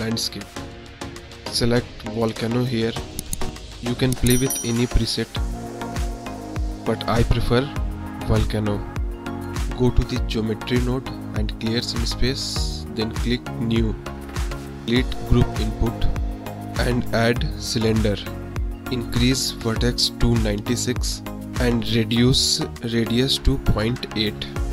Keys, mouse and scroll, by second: 1.7-3.2 drag, 3.7 middle drag, 4.0 click, 4.1 middle drag, 4.2 click, 4.6 middle drag, 4.8-5.1 drag, 8.5 click, 8.8 click, 9.3 click, 9.6 drag, 10.4 click, 11.7 click, 13.1-13.6 drag, 13.9 middle drag, 15.2 middle click, 15.2 click, 15.7 click, 16.2 x, 17.0 shift+a, 19.3 click, 22.9-24.2 drag.